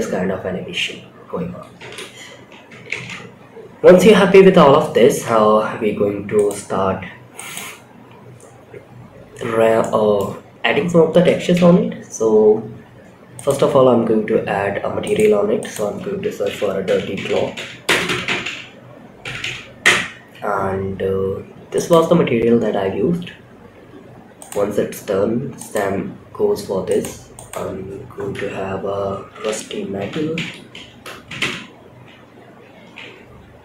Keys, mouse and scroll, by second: 1.1 space, 2.3 shift+Left, 2.8-3.1 scroll down 2, 3.1-5.3 scroll up 2, 5.9 click, 6.7 click, 7.8-8.1 scroll down 2, 8.1-9.1 scroll up 4, 9.1-9.5 shift+middle drag, 10.9 n, 12.7 click, 14.4 click, 14.9-19.2 drag, 24.9 click, 26.2-33.6 drag.